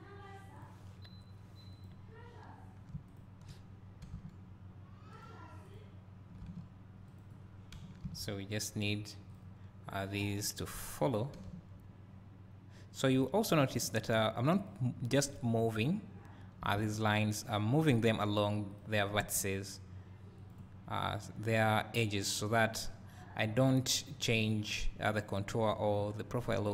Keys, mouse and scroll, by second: 0.6-4.1 drag, 4.1 g, 5.7 click, 6.5 g, 7.2-8.2 drag, 9.3 click, 10.1 scroll up 1, 11.5 g, 14.7 click, 16.7 g, 17.9 click, 19.3 g, 20.5 click, 23.1-23.5 scroll down 1, 24.5 click, 25.4-25.9 scroll up 2, 25.6 click, 25.9-26.4 scroll down 2, 26.4-26.7 scroll up 2.